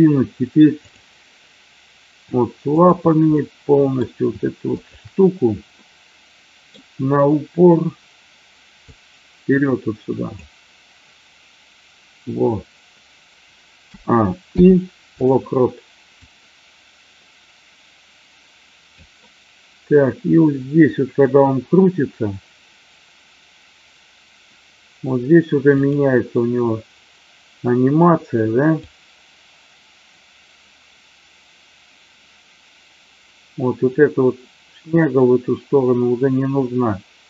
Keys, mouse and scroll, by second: 0.8 click, 2.7-3.2 shift+drag, 3.3-3.9 middle drag, 4.8 shift+click, 5.8-6.8 middle drag, 8.8-10.4 drag, 13.8 a, 14.4 i, 16.1-19.0 drag, 25.6 click, 28.8-37.2 drag.